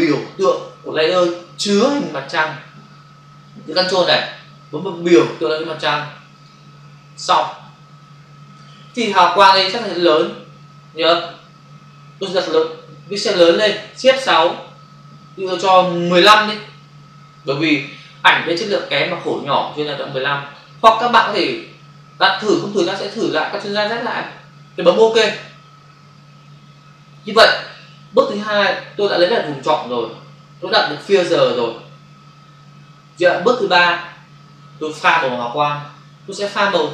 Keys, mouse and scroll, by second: 6.4 ctrl+click, 14.8 shift+F6, 16.1 1, 25.1 Return.